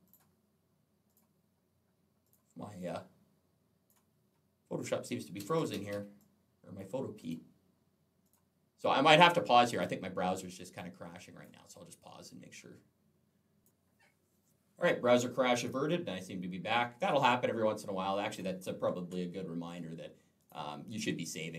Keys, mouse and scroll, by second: 0.9 click, 2.1 click, 2.6 click, 5.2 Escape, 5.4 Escape, 6.0 click, 7.0 click, 8.1 click, 9.5 click, 10.6 click, 13.5 click.